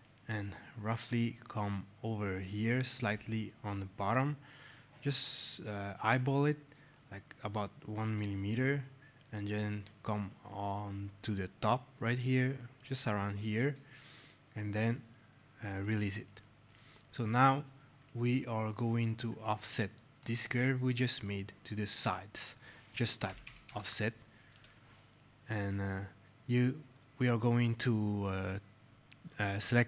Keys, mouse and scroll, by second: 0.3 alt+scroll, 1.6 alt+scroll, 2.5 alt+scroll, 3.3-3.7 scroll, 7.9 click, 8.5 alt+scroll, 9.7 alt+scroll, 10.7 alt+scroll, 11.6-12.3 scroll, 13.5 click, 15.6 right click, 16.1 alt+scroll, 17.6 right click, 17.7 alt+scroll, 20.1 click, 22.9-23.8 typing, 24.4 Return.